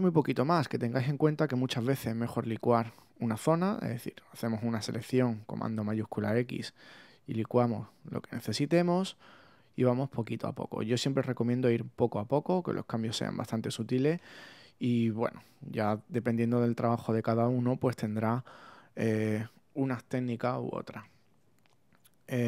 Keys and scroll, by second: 5.5 shift+super+x, 12.8 super+d, 19.8 super++, 20.6 super++, 22.0 alt+super+z.